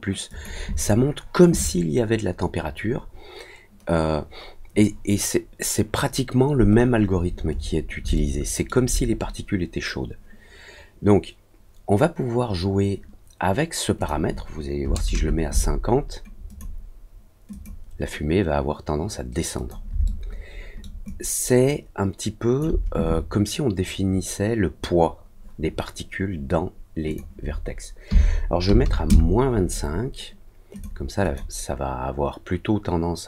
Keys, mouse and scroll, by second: 0.2 click, 6.7 scroll up 1, 6.7 scroll down 1, 6.8 middle click, 7.1 middle click, 7.1 scroll up 1, 7.5 scroll down 1, 8.1 alt+middle click, 13.9 click, 16.4 click, 17.5 click, 19.5 click, 20.0 alt+middle click, 21.0-22.5 alt+drag, 27.0 click, 30.7 click, 31.2 click.